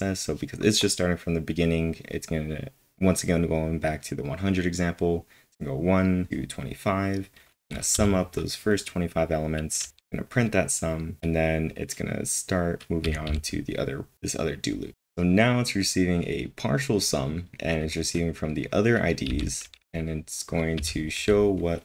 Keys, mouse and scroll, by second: 7.6 typing, 9.8 typing, 13.0-13.7 typing, 19.3 typing, 21.6 typing.